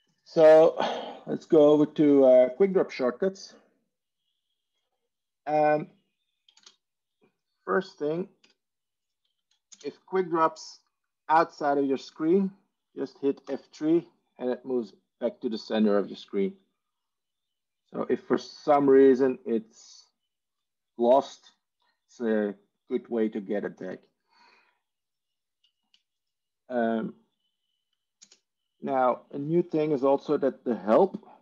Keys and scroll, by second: 4.5 ctrl+e, 6.5 ctrl+space, 8.3 Escape, 9.6 ctrl+space, 13.3 F3, 28.4 ctrl+space, 30.1 ctrl+h.